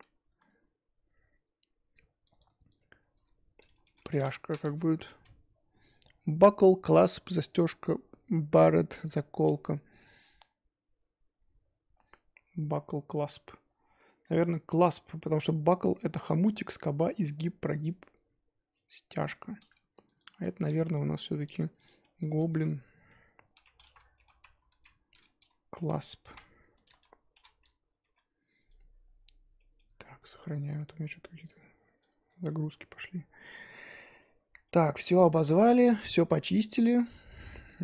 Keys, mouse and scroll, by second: 0.4 click, 20.1-28.0 drag, 28.7 click, 29.1 scroll down 2, 29.5-32.4 middle drag, 32.4 scroll down 1, 32.7-33.1 middle drag, 33.1-33.5 scroll up 2, 33.7-34.5 middle drag, 34.5 scroll down 3, 34.6-37.8 middle drag.